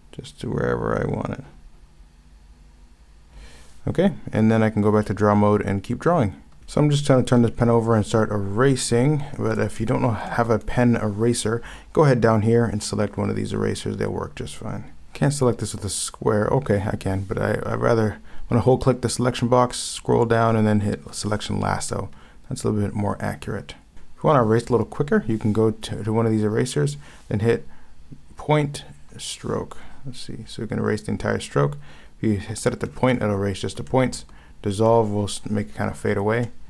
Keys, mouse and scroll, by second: 6.6 ctrl+z, 9.9 ctrl+z, 15.0 ctrl+z, 23.9 ctrl+z, 33.9 ctrl+z, 36.4 ctrl+z.